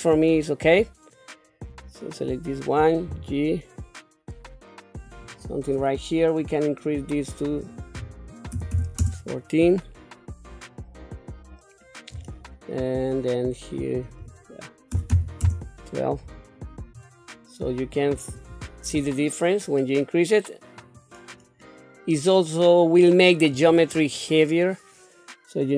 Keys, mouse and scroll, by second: 1.7 click, 3.1 g, 6.4-7.4 scroll up 4, 7.4-9.0 drag, 14.0-15.4 drag, 17.9 click, 18.3-21.5 drag, 22.1-23.5 scroll up 2, 23.5-25.7 drag.